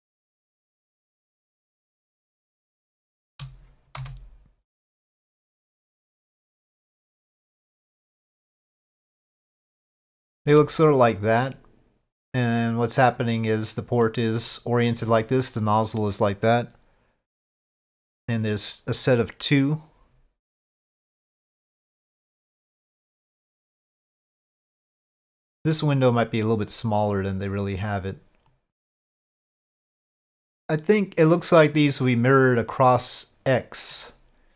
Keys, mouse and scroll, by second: 2.2-2.9 middle drag, 3.1 shift+middle click, 4.0 3, 5.5 click, 6.6-10.2 drag, 10.3 shift+drag, 10.3 shift+middle drag, 11.4-13.3 middle drag, 14.0-14.6 middle drag, 17.5-19.0 middle drag, 20.7-21.5 middle drag, 22.7-23.0 middle drag, 25.3 click, 26.7-29.1 drag, 32.7-34.0 middle drag.